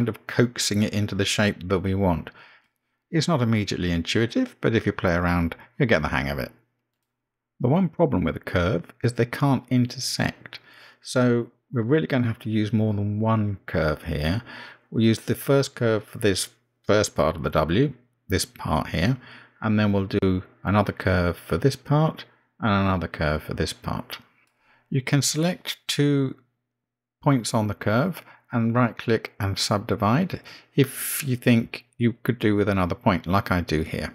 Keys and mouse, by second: 1.7 click, 2.0 g, 5.0 g, 7.4 g, 11.3 click, 11.6 g, 14.6 click, 14.9 g, 17.3 click, 17.8 g, 19.9 click, 20.2 g, 22.7 g, 25.5 click, 27.4 shift+click, 28.4-31.6 right drag.